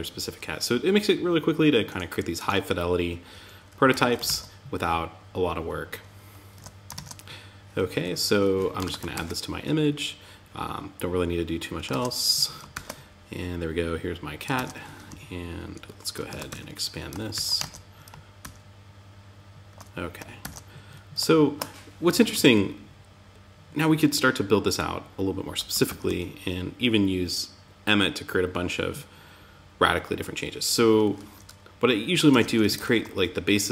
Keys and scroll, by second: 3.3 super+l, 3.6 super+c, 5.9 super+1, 6.3 super+Tab, 8.2 super+v, 8.5 super+s, 11.2 super+Tab, 12.1 super+r, 13.9 super+Tab, 14.4 Down, 15.6 super+Right, 15.8 Tab, 16.7 super+s, 16.9 super+Tab, 17.8 super+r, 19.8 super+Tab, 24.9 Down, 31.6 super+Tab, 32.2 super+r, 33.1 super+Tab, 33.5 super+z.